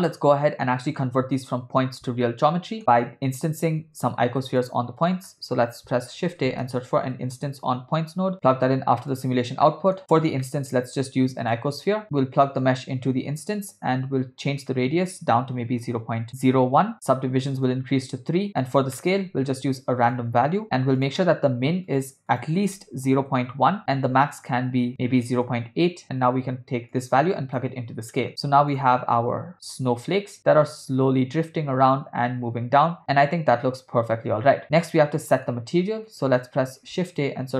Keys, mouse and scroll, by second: 0.1 ctrl+middle click, 2.3 middle click, 3.0 click, 3.8 shift+a, 8.3 BackSpace, 9.7 middle click, 10.4 middle click, 10.7 shift+a, 12.6-14.5 drag, 14.6-16.3 drag, 17.5 click, 18.5 click, 19.0 middle click, 19.4 shift+a, 22.3-23.6 drag, 24.4-25.5 drag, 27.0-27.8 drag, 28.7 click, 29.5 space, 34.6 space, 34.8 middle click, 36.1 click, 36.5 shift+a.